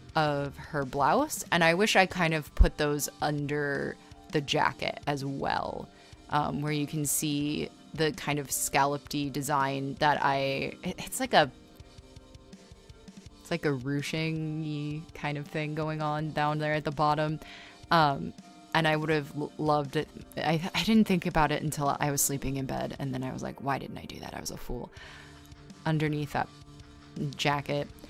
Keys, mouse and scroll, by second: 0.0-2.0 typing, 3.5 scroll, 4.0 r, 4.6 r, 4.8 scroll, 5.4 space, 7.0 scroll, 8.2 ctrl+z, 9.1-10.1 typing, 11.0 ctrl+z, 12.2-16.4 typing, 20.3 b, 22.9-25.0 typing.